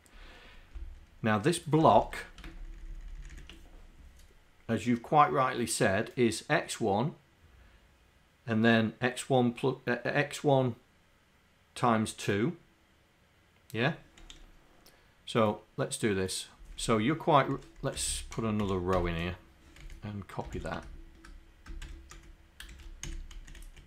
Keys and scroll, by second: 1.8 Home, 2.8 shift+Down, 3.2 shift+Down, 16.7 Down, 18.0 Home, 18.6 End, 19.0 \, 19.8 Up, 22.1 Down, 23.1 Up, 23.4 Down, 23.6 Down.